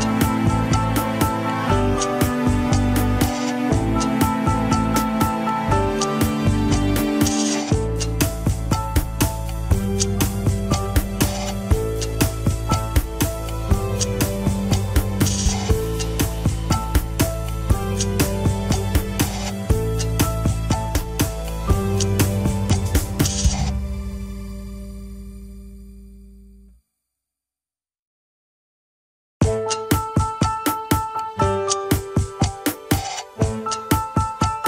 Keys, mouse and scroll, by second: 0.7 click, 1.6 g, 3.5 click, 4.4 g, 6.7-7.5 scroll down 4, 7.5 a, 8.0 alt+r, 8.4 scroll down 3, 9.0-9.7 shift+middle drag, 9.7 click, 10.7 r, 16.9 ctrl+s, 24.0 scroll down 6, 24.7-25.0 shift+middle drag, 25.0 scroll down 1, 26.0 a, 26.9 alt+g, 27.3 ctrl+s, 27.5-27.9 scroll down 2, 27.9 shift+middle click, 28.3-29.3 scroll up 3, 29.3 click, 30.3 r, 33.1 scroll up 1, 34.0-34.6 shift+middle drag.